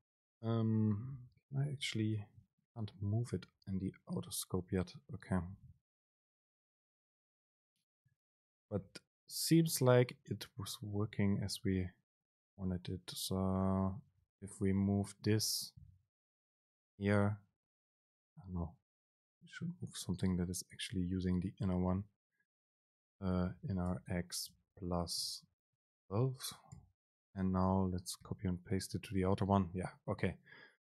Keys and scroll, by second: 0.1 Down, 0.5 ctrl+shift+super+Up, 1.3 shift+Down, 1.8 ctrl+shift+super+Up, 2.4 ctrl+shift+super+Down, 3.3 ctrl+shift+super+Up, 8.5 super+space, 14.1 Up, 14.9 ctrl+shift+super+Down, 15.8 super+x, 16.9 super+v, 18.8 super+z, 24.0 super+space, 26.1 shift+Down, 26.9 super+x, 28.3 super+v.